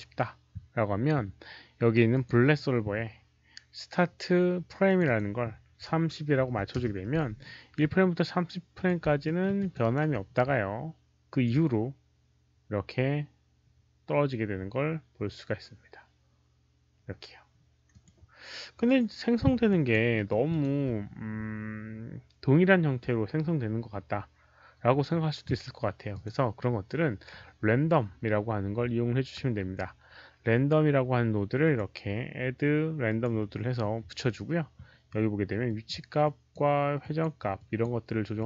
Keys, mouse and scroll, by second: 2.0 click, 4.8 click, 6.5 KP_0, 6.6 Return, 8.6 click, 9.1 alt+middle click, 9.5 Return, 9.5 alt+click, 9.5-9.8 typing, 9.6 Return, 9.7 alt+right click, 9.8 Return, 11.2 Return, 11.2 alt+click, 11.2 alt+right click, 11.2 alt+middle click, 11.2 KP_0, 11.2 KP_3, 11.3 Return, 11.3 alt+right click, 11.3 alt+middle click, 11.3 KP_0, 11.3 KP_3, 12.9 Return, 12.9 alt+click, 12.9 alt+right click, 12.9 alt+middle click, 12.9 KP_0, 12.9 KP_3, 17.8 alt+click, 18.7 alt+click, 18.8 alt+right click, 18.8 alt+middle click, 19.6 alt+click, 20.1 alt+middle click, 20.1 alt+right click, 20.4 alt+click, 20.4 alt+right click, 26.0 alt+click, 28.6 alt+middle click, 31.5 click, 33.0 click, 35.6 click, 36.1 click, 36.9 click, 37.5 click, 38.3 click.